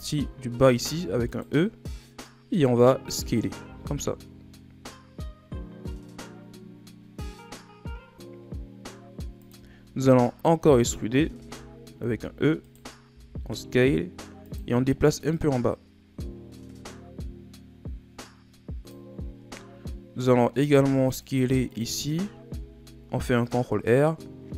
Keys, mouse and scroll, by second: 0.7 e, 2.1-3.6 drag, 3.6 s, 9.7-10.1 shift+scroll down 1, 10.1-10.5 scroll up 2, 10.5 z, 11.2 z, 12.0 e, 13.0 s, 15.2-18.4 drag, 20.6 ctrl+r, 22.4 s.